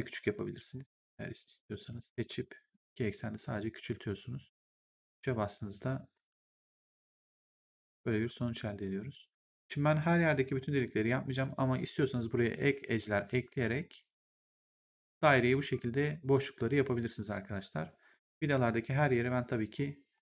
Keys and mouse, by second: 0.1 1, 0.9 right click, 1.3 click, 2.1 r, 3.1 click, 4.5 3, 4.9 right click, 7.2 click, 11.3 click.